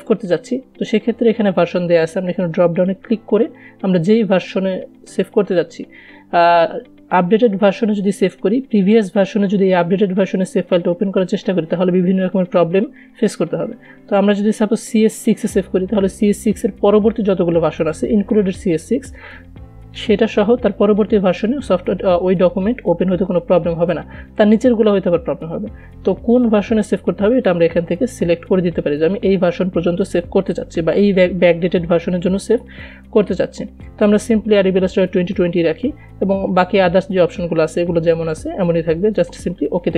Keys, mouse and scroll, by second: 3.2 click, 35.3 click.